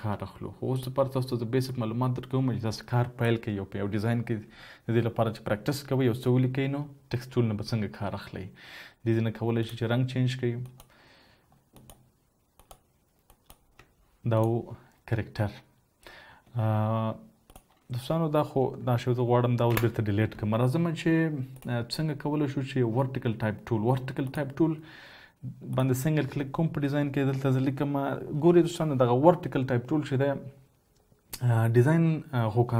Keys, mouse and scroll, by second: 21.4 Delete, 23.2 right click.